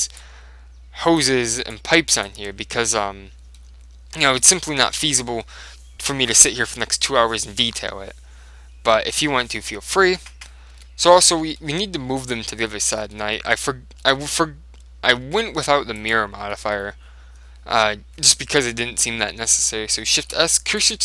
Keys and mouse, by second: 0.3-3.5 drag, 2.5 Tab, 3.0 middle click, 3.6 click, 4.3 Tab, 10.8 Tab, 11.4-18.3 middle drag, 16.1-17.8 right drag, 18.8-20.5 middle drag, 20.3 shift+s.